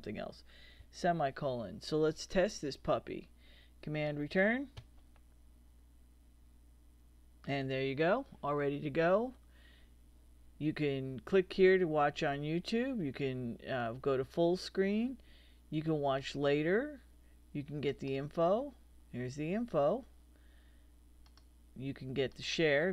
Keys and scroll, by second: 4.8 super+Return.